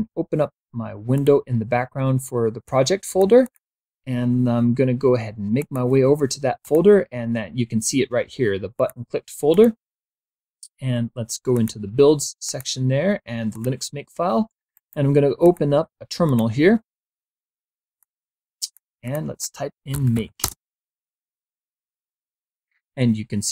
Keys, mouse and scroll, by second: 0.8 click, 2.3 click, 5.2 click, 6.3 click, 8.4 click, 9.1 click, 11.2 click, 12.1 click, 13.1 click, 14.4 right click, 15.0 click, 15.9 click, 17.6 click, 18.7 click, 19.3-20.4 typing.